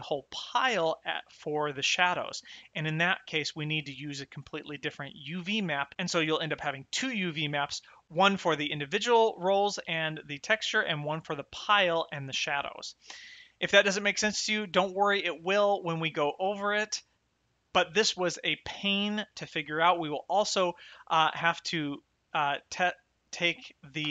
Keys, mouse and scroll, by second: 1.3 click, 3.2 click, 8.4 click, 11.0 click, 12.3 click, 19.2 middle click, 19.9 shift+middle click, 21.6 shift+middle click, 23.3 click, 23.9 m.